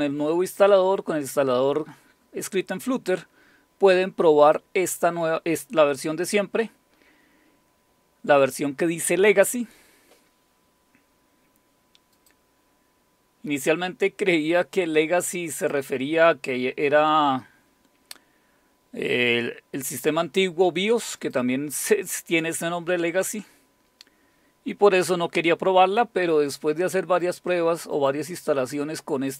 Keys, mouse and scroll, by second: 4.5 click, 12.2 click, 15.6 click, 21.2 click, 27.2 click, 27.9 click, 28.6 click, 29.3 click.